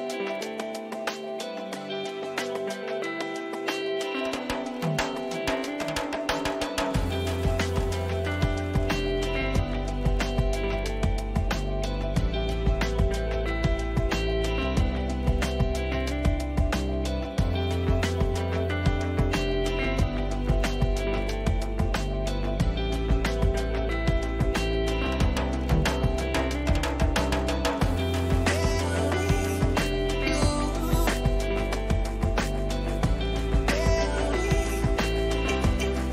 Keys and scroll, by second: 9.0 Return, 9.9 ctrl++, 19.8 space, 26.5 ctrl++, 30.0 Caps_Lock, 30.0 s, 30.1 Caps_Lock, 30.4 h.